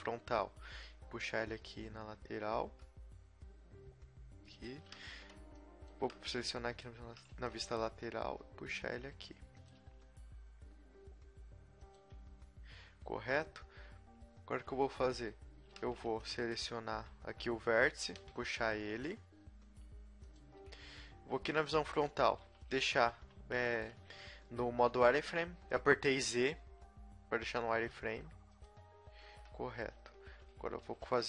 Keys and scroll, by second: 0.6 g, 4.8 a, 5.0 b, 6.3 b, 7.3 b, 8.2 g, 10.0 r, 14.6 a, 14.8 a, 15.9 a, 16.1 b, 18.1 e, 20.4 z, 21.9 KP_1, 22.6 z, 25.1 g, 29.2 z, 29.9 a, 30.8 ctrl+r.